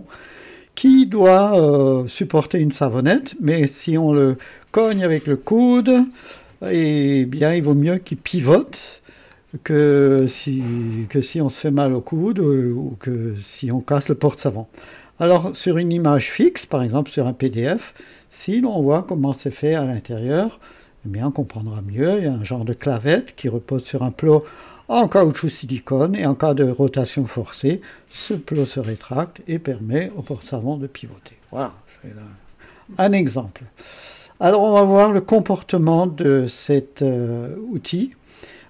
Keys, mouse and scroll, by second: 0.3 scroll up 1, 1.0-1.4 scroll down 1, 1.7 scroll up 1, 9.7 scroll down 1, 16.7 click, 33.7 click, 35.5 click.